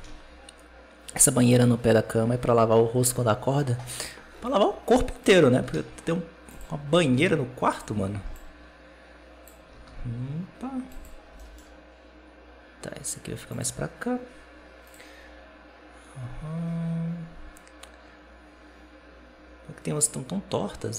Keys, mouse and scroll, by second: 5.1 right click, 5.4 r, 6.8 r, 8.2-9.6 drag, 9.6 r, 11.2 g, 14.7-17.9 drag.